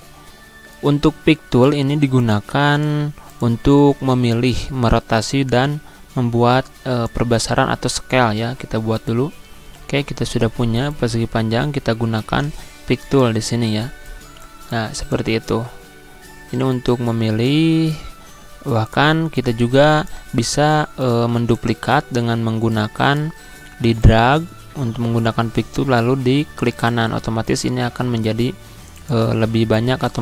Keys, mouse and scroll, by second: 10.5 right click, 11.9-18.4 drag, 18.4 right click, 19.1-26.5 drag, 26.5 right click, 27.2-30.2 drag.